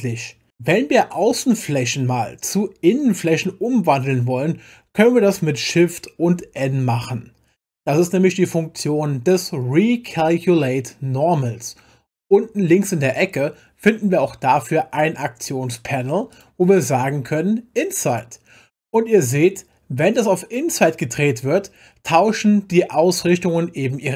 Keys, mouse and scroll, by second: 6.3 shift+n, 16.3 click, 18.1 click.